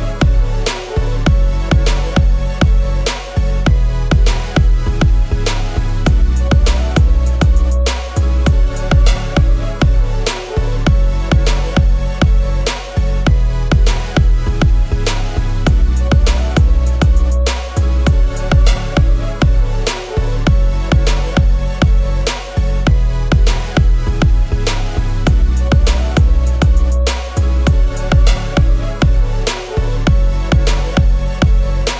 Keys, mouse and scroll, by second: 3.5-5.0 scroll, 5.0-5.6 scroll, 7.0 alt+click, 9.0-9.3 scroll up 1, 9.4 i, 11.7 typing, 15.5 double click, 19.7 BackSpace, 20.7 shift+Down, 22.1 BackSpace, 23.0 shift+Down, 23.2 shift+Down, 23.4 shift+Down, 23.5 shift+Down, 23.8 Delete, 31.7 alt+Up.